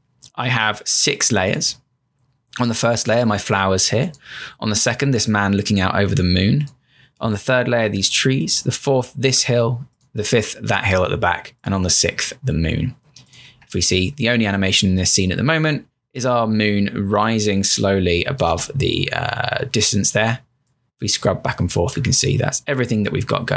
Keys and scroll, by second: 13.5 Return, 18.5 Return.